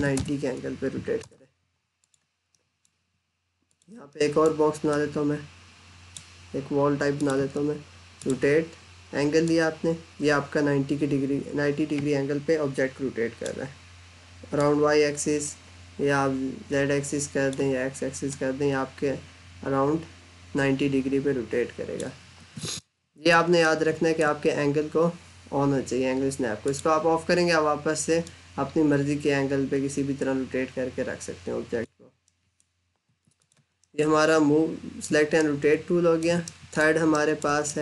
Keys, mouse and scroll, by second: 1.0 Return, 1.8 click, 2.4 middle click, 3.5 click, 3.9 scroll down 1, 3.9 middle click, 4.7 click, 22.2 Escape, 22.6 middle click, 23.5 middle click, 26.4 click, 32.1 middle click, 32.3 scroll up 1, 32.9 Escape, 33.2 click, 33.7 middle click, 35.1 middle click, 36.3 middle click, 37.0 alt+middle click.